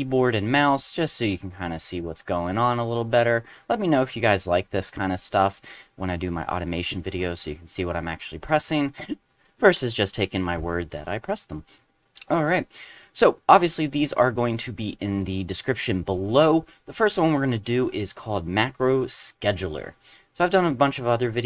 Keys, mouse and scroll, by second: 13.8 click, 15.2 click.